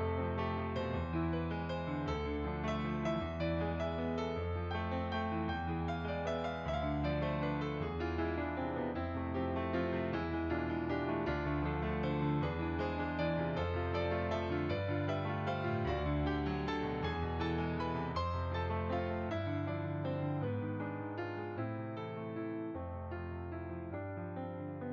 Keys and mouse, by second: 0.0 z, 1.0 click, 2.8 s, 2.8 click, 3.5 s, 5.0 click, 5.1 middle click, 7.3 click, 11.4 click, 15.7 s, 16.6 click, 17.1 click, 17.2 g, 17.9 click, 19.5 g, 21.0 s, 21.6 click, 22.0 s, 22.4 click, 22.9 g, 24.1 click.